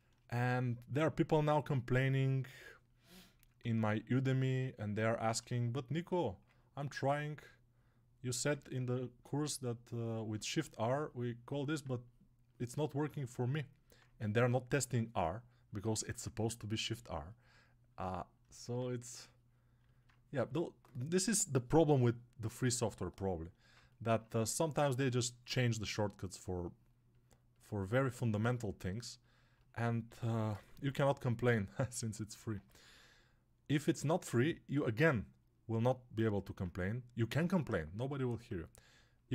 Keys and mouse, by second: 29.9 g, 30.4 ], 32.3 ctrl+z.